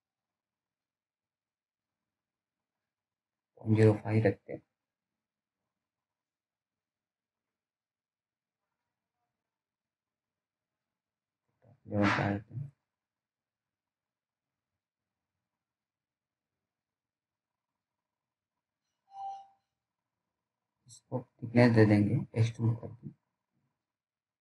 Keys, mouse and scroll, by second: 2.5 click, 7.4 click, 7.4 click, 10.2 right click, 11.0 click, 11.7-12.2 scroll down 1, 12.4 alt+middle click, 13.2-13.8 alt+scroll up 2, 13.8 click, 18.4-18.9 scroll down 1, 18.9 alt+middle click, 19.5-21.1 scroll up 1, 21.1 scroll down 1, 23.1 click.